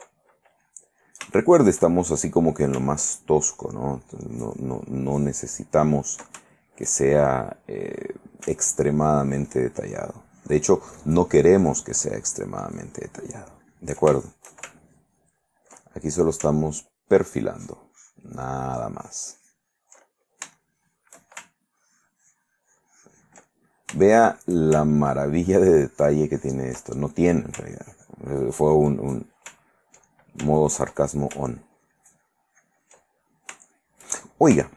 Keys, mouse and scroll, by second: 1.4-2.6 ctrl+shift+middle drag, 3.2 ctrl+click, 3.7-5.1 ctrl+drag, 5.2 ctrl+click, 6.6 ctrl+shift+middle click, 9.1-11.0 ctrl+drag, 11.1 ctrl+click, 11.7-14.2 ctrl+drag, 14.4 ctrl+shift+middle click, 15.0 ctrl+shift+click, 17.8 ctrl+click, 18.6-20.7 ctrl+drag, 21.0 shift+middle click, 21.8-24.7 ctrl+drag, 25.5 ctrl+click, 26.0 ctrl+click, 27.0 ctrl+middle click, 27.9-29.1 ctrl+drag, 29.1 ctrl+middle click, 30.2-31.6 ctrl+drag, 31.7-33.7 ctrl+drag, 33.7 ctrl+shift+middle click, 34.0 ctrl+shift+click, 34.4 shift+click.